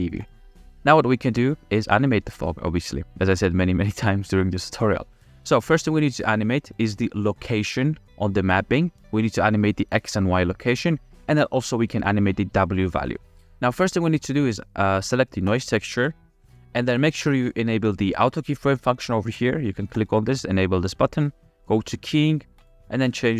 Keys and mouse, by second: 2.8 ctrl+s, 2.8 click, 4.1 middle click, 5.3 middle click, 6.4 click, 13.5 ctrl+z, 15.5 click, 20.1 click, 21.9-22.6 drag.